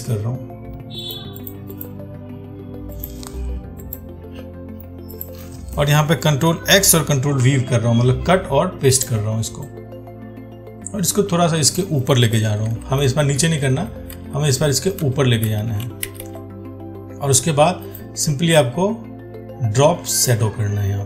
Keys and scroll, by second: 7.0 ctrl+x.